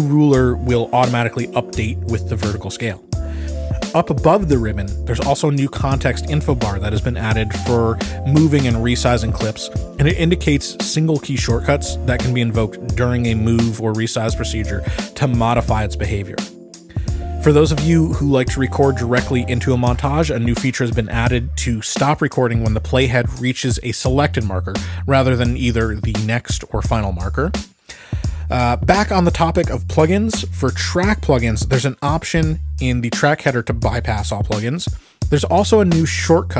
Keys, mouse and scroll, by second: 0.2 Up, 1.2-2.2 ctrl+scroll, 4.2-4.7 ctrl+scroll, 5.0-6.2 scroll, 10.7-15.8 drag, 14.2 t, 18.5 ctrl+z, 20.9 click, 27.8 Escape, 28.0-35.2 drag.